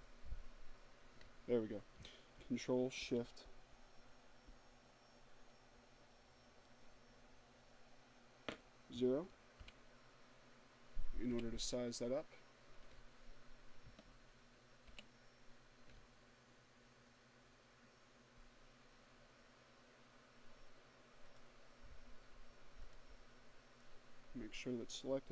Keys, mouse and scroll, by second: 7.3 ctrl+shift+o, 9.1 o, 12.6 ctrl+shift+o, 19.1 click, 20.7 click.